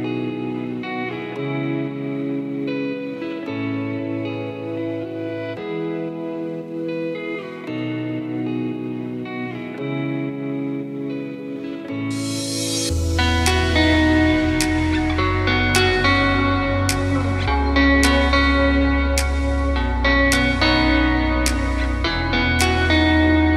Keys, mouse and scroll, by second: 1.4 click, 2.2 click, 3.2-3.5 scroll down 3, 3.5 KP_1, 5.8 shift+super+a, 8.2 click, 11.3 click, 12.1 click, 12.9 ctrl+click, 13.4 ctrl+click, 14.1 ctrl+click, 16.3 KP_Decimal, 17.0 s, 21.7 KP_Decimal.